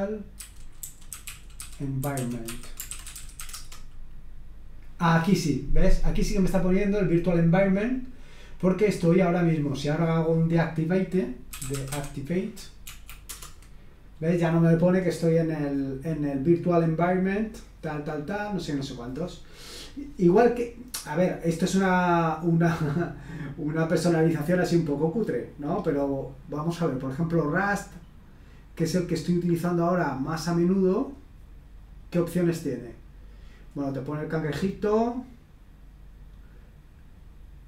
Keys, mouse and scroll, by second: 0.0-3.9 typing, 6.4 click, 10.5 click, 11.3-12.4 typing, 12.8 Right, 13.3 Return, 25.5-26.4 scroll down 1, 26.4-27.6 scroll down 1, 27.6 scroll down 1, 29.5-30.2 scroll up 1, 31.0 click, 32.1-32.9 scroll down 1.